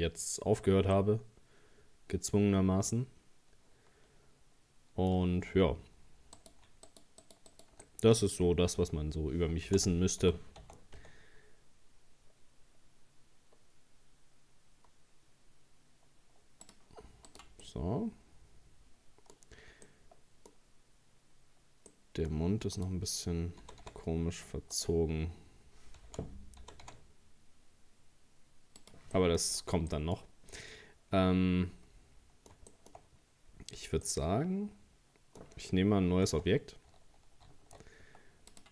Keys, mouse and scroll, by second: 0.5-0.9 scroll down 2, 0.9-4.0 middle drag, 6.4 right click, 6.9 shift+right click, 7.2 shift+right click, 7.5 shift+right click, 7.9-9.7 middle drag, 9.7 o, 10.2 g, 17.3 right click, 17.7-19.4 middle drag, 19.4-19.8 scroll up 1, 19.9-22.8 middle drag, 22.8 right click, 23.6 g, 26.1 o, 26.6 g, 29.2 middle click, 29.6-29.9 scroll down 2, 29.9 middle click, 30.2 scroll up 1, 30.6-33.0 middle drag, 33.0-33.3 scroll up 1, 33.5-34.1 scroll down 2, 34.1-36.3 middle drag, 36.3 Tab, 37.5 shift+a.